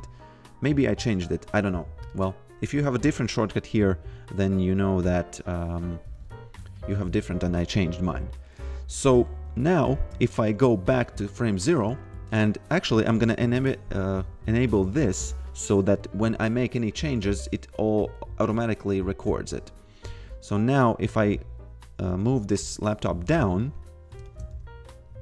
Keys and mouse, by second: 2.0 click, 6.7 click, 8.4 click, 10.0 shift+a, 15.5 click, 20.6 click, 24.2 shift+a, 24.5 f.